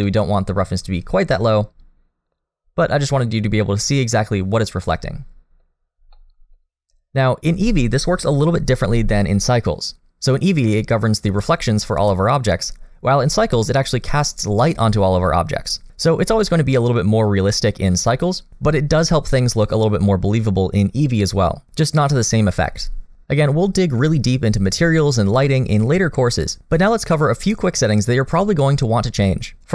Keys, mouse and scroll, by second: 0.0 middle click, 1.5 click, 4.4-4.8 scroll down 1, 4.8 middle click, 5.8 scroll down 2, 6.1 middle click, 6.7-7.5 scroll up 1, 12.1-12.5 scroll down 2, 12.5 middle click, 16.5 middle click.